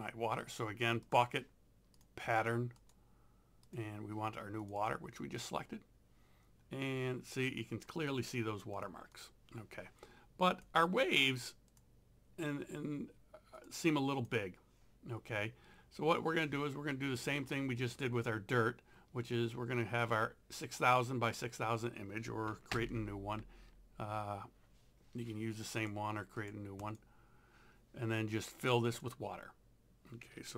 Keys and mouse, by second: 1.1 click, 8.8 click, 13.6 click, 18.0 click, 22.7 ctrl+n, 25.7 click, 28.9 click.